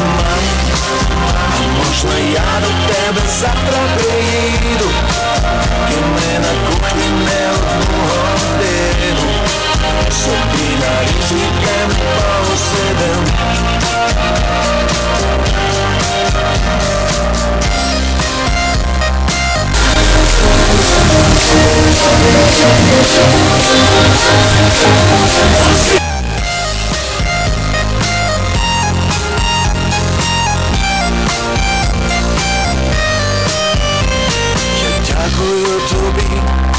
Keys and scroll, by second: 25.9 Page_Down.